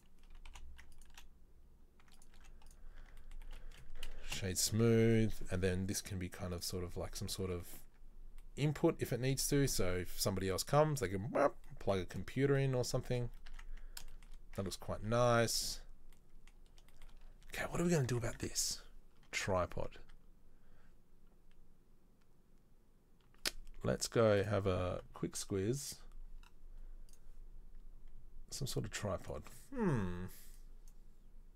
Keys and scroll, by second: 0.5 i, 1.2 e, 2.6 z, 3.2 Tab, 3.6 space, 4.5 z, 7.4 Tab, 8.0 Tab, 13.7 Tab, 14.7 Tab, 18.1 Tab, 18.5 Tab, 19.5 Tab, 19.9 Tab, 20.2 Tab.